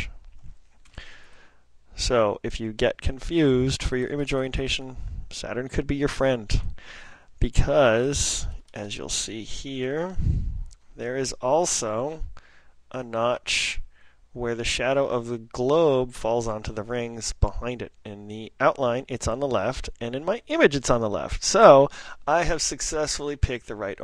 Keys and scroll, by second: 1.9 ctrl+super+n, 2.5 ctrl+super+n, 8.1 super+Up, 8.5 super+Up, 8.7 super+Up, 10.2 ctrl+super+Left, 10.3 ctrl+super+Left, 10.7 ctrl+super+Left, 11.2 ctrl+super+Up, 11.7 ctrl+super+Up.